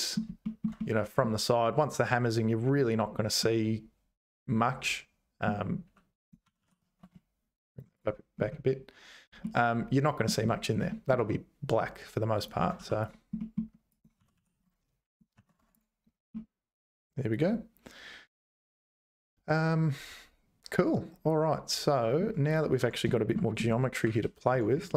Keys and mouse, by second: 0.4 shift+middle click, 0.8 middle click, 3.4-5.4 middle drag, 6.4 g, 9.4 middle click, 10.9 shift+middle click, 12.6 Tab, 12.8 2, 13.4 middle click, 13.9 click, 14.2 g, 15.4 ctrl+s, 15.6 Tab, 16.3-18.6 middle drag, 18.6-22.2 drag, 22.8 Tab, 23.1 shift+click, 24.0 `, 24.5 Tab.